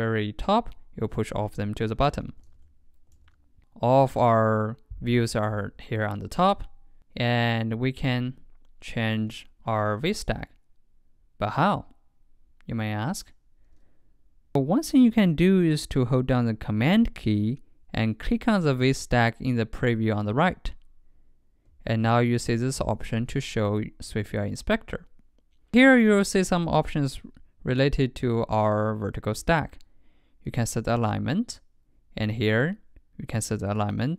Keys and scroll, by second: 2.0 super+z, 2.5 super+z, 3.2 super+z.